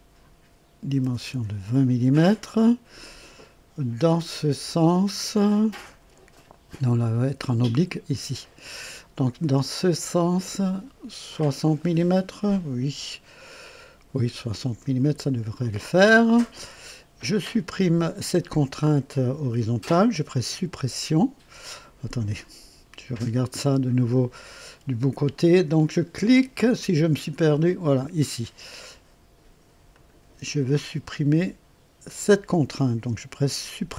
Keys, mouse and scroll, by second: 0.8 KP_2, 1.0 KP_0, 1.3 KP_Enter, 8.3 click, 9.8 click, 14.0 KP_6, 14.3 KP_0, 14.6 KP_Enter, 17.8 click, 20.5 Home, 27.4 click, 29.9 click, 32.0 click.